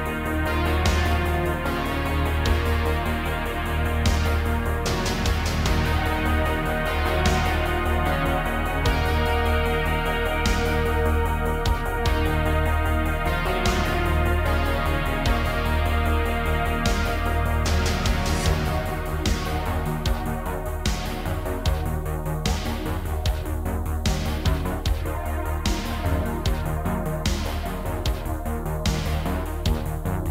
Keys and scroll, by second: 0.8 Tab, 3.3 m, 4.1 m, 6.1 m, 8.3 m, 10.0 1, 10.3 g, 11.9 g, 12.6 g, 13.9 l, 15.0 g, 15.8 g, 27.5-30.3 typing.